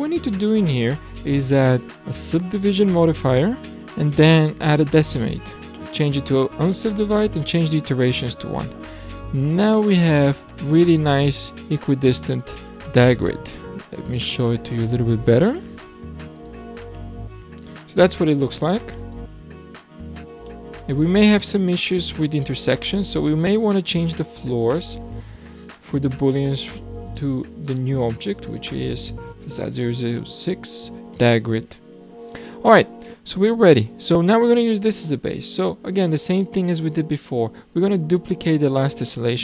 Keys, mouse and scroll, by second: 0.1 click, 1.0-3.7 drag, 3.7 middle click, 4.6-6.1 drag, 6.3 click, 7.4 click, 8.3-8.7 scroll down 4, 8.7-9.1 scroll up 2, 9.1-12.1 middle drag, 14.0 click, 14.4-14.8 scroll down 5, 14.8-16.3 middle drag, 16.3 click, 16.9-19.0 middle drag, 19.0 click, 20.1 scroll down 2, 20.4-21.8 middle drag, 21.8 scroll down 1, 22.0-23.3 scroll up 7, 23.3 click, 25.3-27.1 scroll down 4, 27.1 click, 27.6 click, 29.8-30.1 scroll down 2, 30.1-31.5 middle drag, 31.5 alt+a, 31.9-32.6 scroll down 3, 32.6 shift+scroll down 1, 32.8-33.3 shift+middle drag, 33.3 scroll down 1, 33.4-34.2 scroll up 2, 34.2 click, 35.1-36.5 scroll down 6, 36.5 click, 37.2 click.